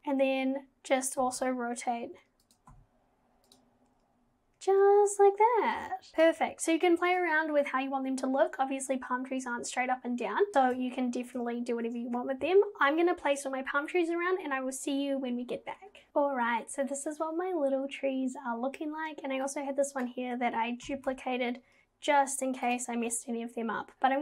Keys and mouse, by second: 1.2 g, 2.7 g, 19.6-20.1 drag, 20.8 g.